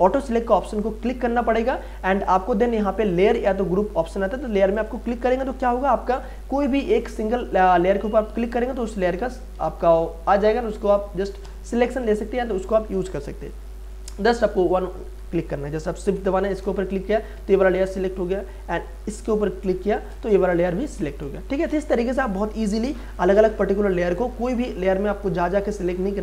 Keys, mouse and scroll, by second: 4.7 click, 6.9 click, 9.5 ctrl+z, 11.2 click, 13.4 click, 14.1 ctrl+z, 14.9 click, 17.6 ctrl+z, 19.9 shift+click, 21.0 ctrl+z.